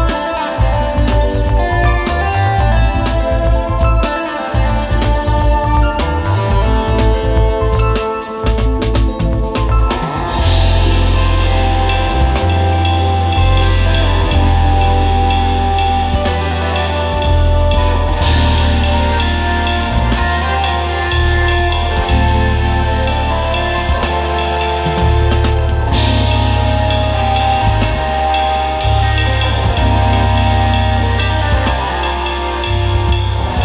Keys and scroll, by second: 4.4-6.4 typing, 9.0 space, 9.5 super+Tab, 10.3 space, 11.2 space, 12.7 space, 13.4 alt+super+space, 14.1 space, 16.6 space, 17.2 space, 17.7 space, 19.4 super+', 19.7 space, 20.9 super+Tab, 23.9 space, 25.2 super+Tab, 25.7 space, 26.2 space, 29.3 space, 29.8 space, 31.3 super+s, 32.3 space, 33.2 space.